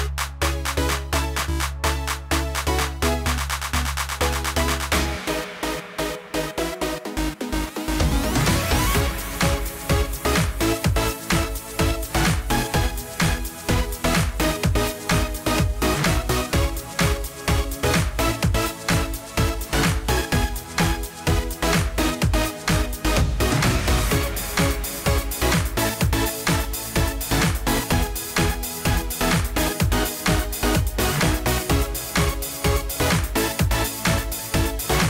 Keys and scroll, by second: 17.3 ctrl+a, 23.2 ctrl+d.